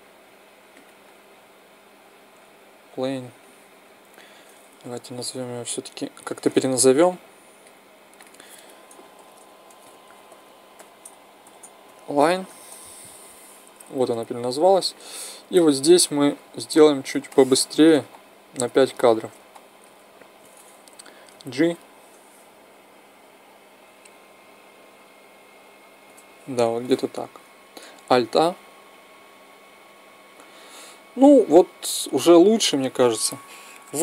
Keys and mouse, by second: 4.5 n, 6.0-9.6 drag, 15.4-19.9 drag, 20.9 g, 27.9 alt+a.